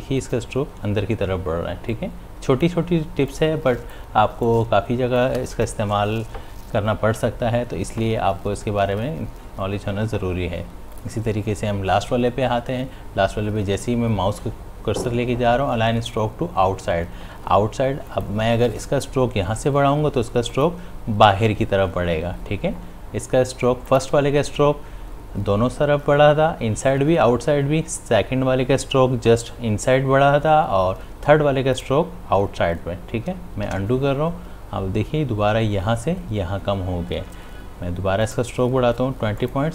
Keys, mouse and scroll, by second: 1.8 space, 11.3 click, 18.5 click, 32.8 click, 34.1 ctrl+z, 38.3-39.7 drag.